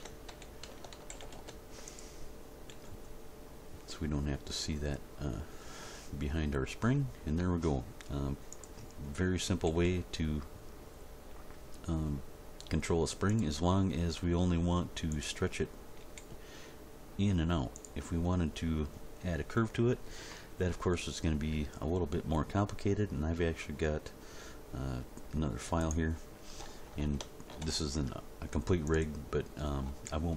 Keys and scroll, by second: 0.9 alt+r, 1.1 alt+g, 1.3 alt+s, 2.7 g, 9.7 g, 14.0 g, 16.0 g.